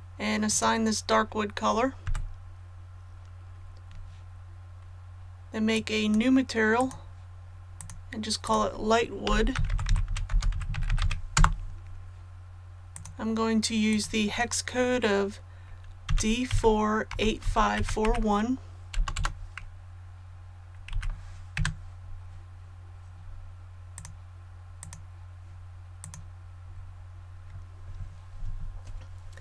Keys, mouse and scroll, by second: 0.4 click, 2.0 a, 5.7 click, 9.2-10.9 typing, 11.3 Return, 12.9 click, 16.0-18.9 typing, 20.8 KP_1, 23.1 scroll down 1, 23.9 click, 26.5-28.5 scroll up 1.